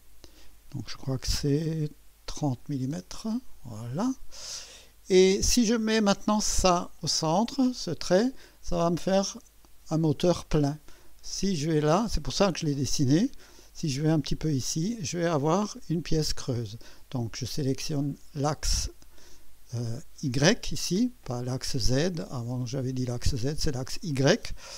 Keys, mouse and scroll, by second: 2.5 KP_3, 2.9 KP_0, 3.1 KP_0, 3.3 KP_Enter, 6.1-14.3 drag, 15.9 click, 17.5 click.